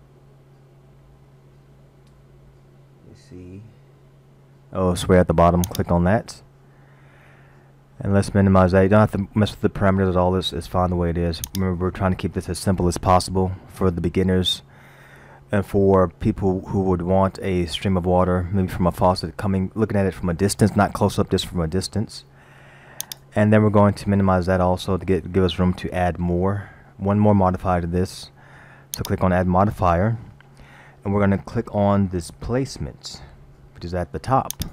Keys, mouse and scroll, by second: 7.6-8.2 scroll down 2, 11.5 click, 23.1 click, 29.0 click.